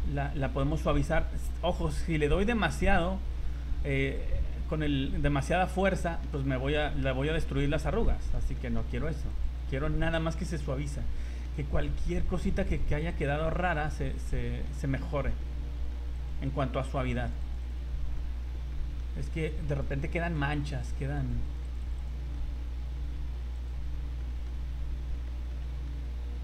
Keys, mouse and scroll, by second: 0.3 click, 0.6 click, 2.9-3.6 scroll up 14, 4.1 click, 5.5-5.8 scroll down 2, 5.9 shift+middle click, 6.3 middle click, 6.5 middle click, 6.7 middle click, 6.9 shift+middle click, 7.0 scroll up 1, 7.3 click, 7.8 click, 8.0 middle click, 8.5 shift+middle click, 8.9 click, 9.5 click, 9.6 click, 10.1 shift+middle click, 10.6 middle click, 11.0 scroll up 1, 11.2 shift+middle click, 11.6 scroll up 1, 11.8 middle click, 12.2 scroll up 2, 12.6 click, 12.9 click, 13.1 click, 13.3 click, 13.5 click, 13.7 click, 13.9 click, 14.1 click, 14.5 shift+middle click, 14.8 middle click, 15.7 middle click, 15.8 shift+middle click, 16.1 click, 16.4 click, 16.9 click, 17.2 click, 17.4 click, 17.6 click, 17.9 scroll down 2, 18.7 shift+middle click, 19.4 click, 19.7 click, 20.1 click, 20.4 click, 20.5 click, 20.7 click, 20.9 click, 21.2 click, 21.4 click, 21.6 click, 21.8 click, 22.0 click, 22.3 middle click, 23.5 click, 24.2 shift+middle click, 24.7 middle click, 24.9 scroll down 2, 25.3 shift+middle click, 25.6 middle click, 26.0-26.4 scroll up 3.